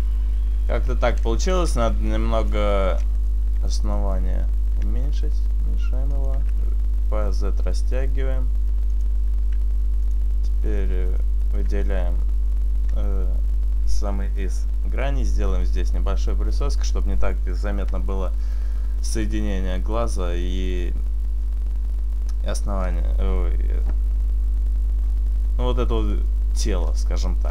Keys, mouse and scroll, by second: 0.9 Tab, 2.5 click, 3.3 right click, 3.8 alt+shift+right click, 5.7 s, 6.4 s, 9.1 click, 10.1 click, 10.7 right click, 11.2 alt+shift+right click, 16.8-18.3 scroll down 1, 18.3-19.1 scroll down 1, 22.9 scroll up 2, 23.2 scroll down 1, 23.4-24.8 scroll down 1, 24.8-25.2 scroll down 2, 26.9-27.5 scroll up 4.